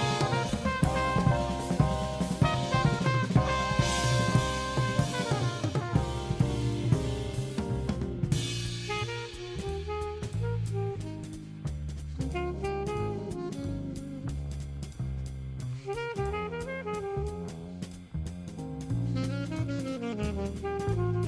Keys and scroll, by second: 0.2 super+space, 5.3 super+space, 10.9 super+space, 13.6 super+c, 14.4 super+f, 17.6 super+c.